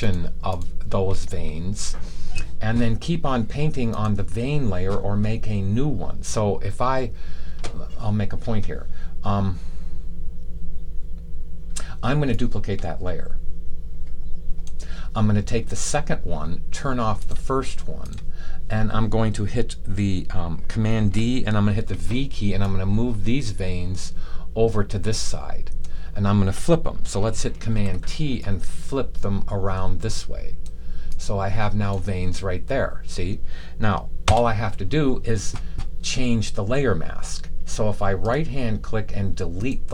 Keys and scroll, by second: 20.9 super+d, 21.8 super+v, 27.6 super+t.